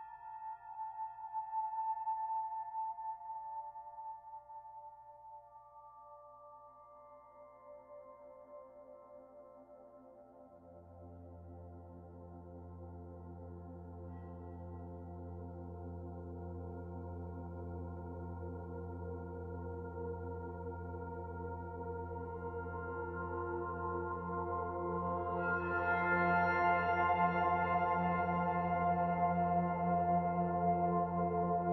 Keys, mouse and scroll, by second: 1.9 click, 4.6 e, 5.7 click, 9.8 click, 11.9 s, 19.2 click, 21.4 s, 26.9 middle click, 27.9 scroll down 1, 28.3 shift+middle click, 29.2 KP_Decimal, 30.1 middle click, 31.6 middle click.